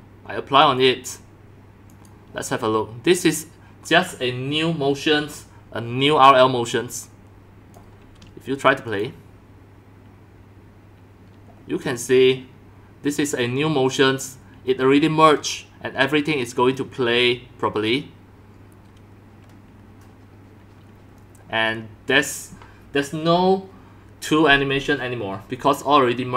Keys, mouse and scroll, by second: 1.9 click, 3.1 click, 6.9 click, 8.9 click, 14.0 click.